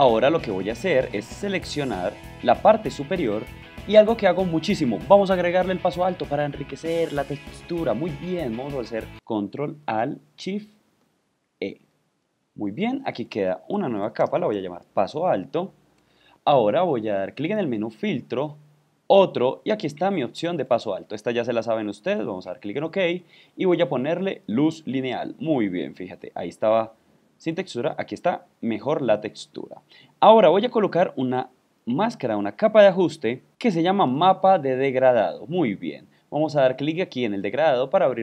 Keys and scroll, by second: 1.9 super+0, 11.5 alt+shift+super+e.